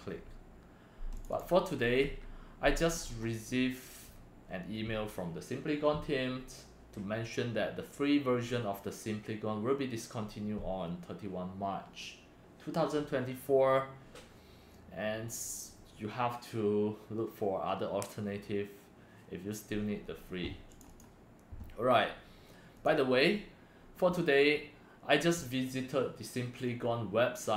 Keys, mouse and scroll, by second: 1.1 click, 1.3 click, 2.0 Right, 2.9 scroll up 4, 3.4 scroll down 1, 20.7 click, 20.9 click, 22.7 click.